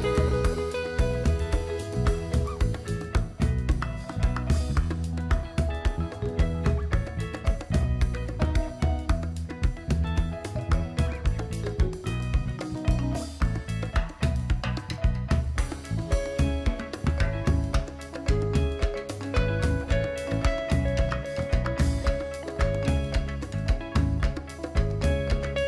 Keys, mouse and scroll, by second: 0.1 alt+scroll down 1, 0.4-0.7 alt+scroll up 1, 1.2 click, 1.8 Delete, 2.2 click, 2.5 Delete, 3.2-3.5 alt+scroll down 1, 4.0 alt+scroll down 1, 4.3 click, 4.9 alt+scroll down 1, 5.1 click, 5.7 click, 6.4 alt+scroll up 1, 7.0-8.3 drag, 8.3 right click, 9.6 click, 10.0-10.3 alt+scroll up 1, 10.3-10.8 alt+scroll down 2, 12.1-12.4 alt+scroll down 1, 12.4 alt+scroll up 1, 12.9-14.9 drag, 15.1-15.5 alt+scroll up 1, 16.7 click, 16.8 right click, 17.3 click, 18.8 right click, 20.7 click, 21.8 alt+scroll down 1, 22.4 click, 23.0-23.6 alt+scroll down 1.